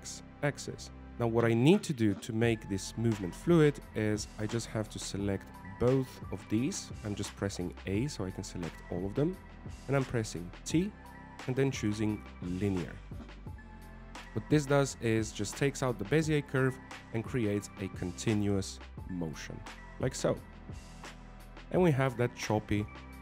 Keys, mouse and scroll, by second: 6.2 a, 6.5 a, 9.5 a, 12.4 t, 14.1 alt+a, 14.9 alt+a, 15.5 click, 19.5 alt+a, 20.6 scroll down 2, 20.9 middle click.